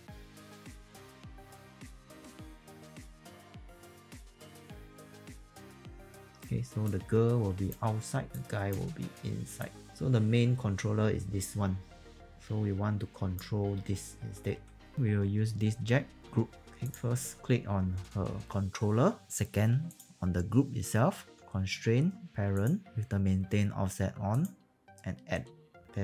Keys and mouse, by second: 0.0-6.5 typing, 0.0 middle click, 0.3 alt+right click, 0.3 alt+click, 0.4 click, 0.6 alt+middle click, 0.8 click, 1.0 click, 1.3 click, 1.5 click, 1.8 click, 2.3 click, 2.7 alt+click, 3.2 alt+click, 3.4 click, 3.7 click, 4.2 alt+click, 4.4 click, 4.5 alt+right click, 4.9 click, 5.0 alt+click, 5.3 click, 5.4 click, 5.8 click, 6.8 click, 7.8 q, 8.3 e, 8.3 click, 14.5 q, 16.2 click, 19.8 ctrl+click, 21.4 click, 25.8 w.